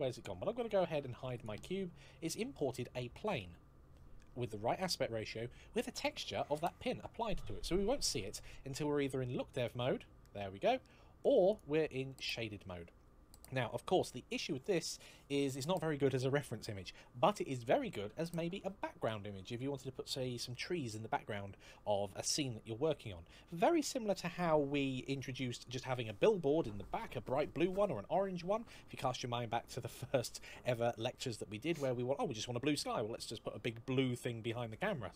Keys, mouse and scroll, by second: 1.2 click, 1.8-2.9 scroll up 1, 3.2 middle click, 10.0 middle click, 11.3 click.